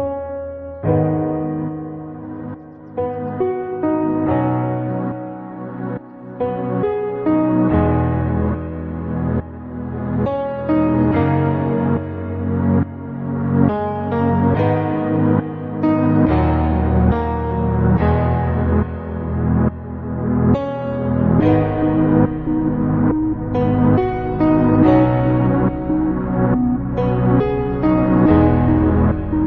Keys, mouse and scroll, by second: 0.3 Tab, 0.8 click, 1.3 shift+click, 1.6 shift+click, 2.0 shift+click, 2.6 shift+click, 3.4 shift+click, 3.8 shift+click, 4.7 shift+click, 5.6 click, 7.1 x, 8.7-9.1 scroll down 1, 9.1-9.7 scroll up 1, 9.7 Tab, 10.3 click, 10.9 Tab, 12.2 alt+r, 13.2 Escape, 14.1 click, 14.9 ctrl+r, 19.1 click, 19.3 alt+z, 19.8 alt+z, 20.2 click, 20.5 click, 21.2 ctrl+r, 23.3 click, 23.7 click, 24.3 ctrl+r, 29.0 click.